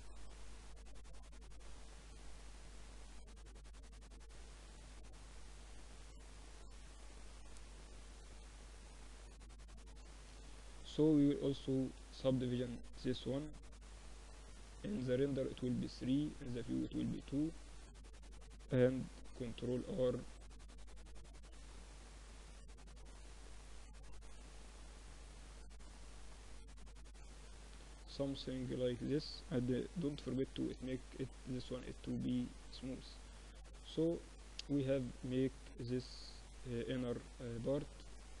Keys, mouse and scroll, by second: 1.1 Tab, 1.9 Tab, 2.9 Tab, 3.4 Tab, 4.8 ctrl+r, 7.5 ctrl+r, 9.4 Tab, 11.3 ctrl+3, 12.1-13.9 middle drag, 13.1 t, 13.9 click, 16.0 t, 16.5-17.5 middle drag, 17.0 Tab, 17.7-19.2 middle drag, 18.6 ctrl+r, 20.1 ctrl+r, 22.3 ctrl+r, 24.6 ctrl+r, 26.1 Tab, 26.5 middle click, 28.8 middle click, 29.6 t, 30.3 middle click, 30.4 t, 30.7-32.2 drag, 31.3 Tab, 32.5 Tab, 34.7 middle click, 35.6-38.4 middle drag.